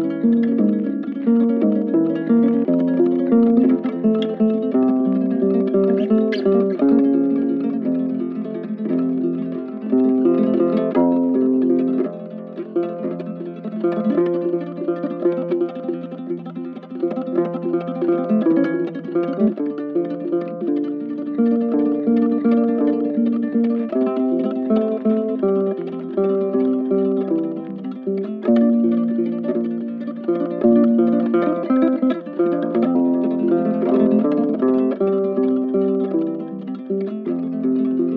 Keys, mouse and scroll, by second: 9.3 double click, 14.0 shift+click, 14.2 shift+right click, 14.9 ctrl+click, 15.7 shift+click, 18.6 shift+click, 19.6 shift+click, 22.0 shift+click, 23.2 right click, 26.7 double click, 30.4 right click, 31.3 double click, 32.9 double click, 37.5 ctrl+click, 37.9 shift+click.